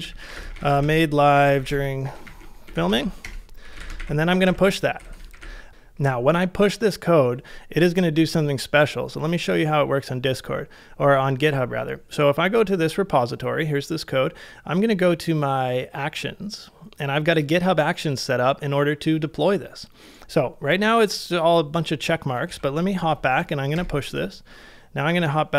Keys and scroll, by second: 0.0-1.3 typing, 5.0-5.8 typing, 22.5 super+Tab, 23.7 Return, 24.4 super+Tab.